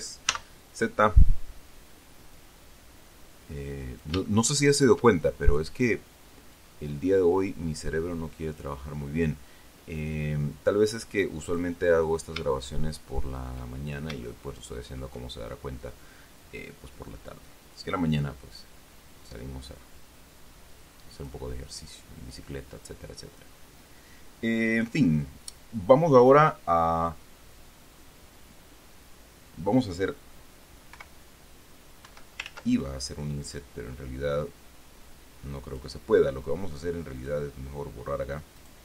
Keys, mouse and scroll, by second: 0.6 z, 2.7-4.5 drag, 4.6 shift+middle click, 6.9-9.1 drag, 10.3-12.1 drag, 12.4 scroll up 1, 12.9 shift+middle click, 12.9 shift+scroll up 1, 14.1 shift+scroll up 1, 14.6 shift+middle click, 18.1-21.8 drag, 22.2 scroll up 1, 31.3 i, 32.4 Escape, 32.8 ctrl+z, 34.8-36.3 drag, 37.5 click.